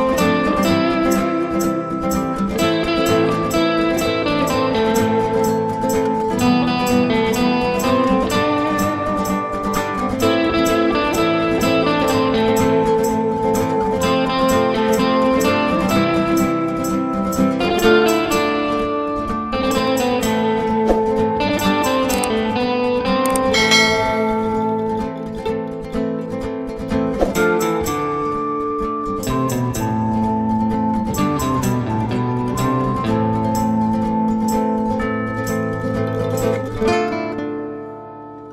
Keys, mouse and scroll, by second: 2.0 F2, 3.2 click, 3.8 space, 6.3 F4, 7.4 F9, 10.9 click, 11.5 double click, 12.2 click, 13.3 ctrl+o, 14.9 click, 17.4 click, 21.3 F4, 22.7 F9, 26.3 F9, 27.0 click, 28.3-29.0 scroll down 1, 29.0-29.8 scroll up 1, 31.3 click, 33.4 click, 37.0 F4.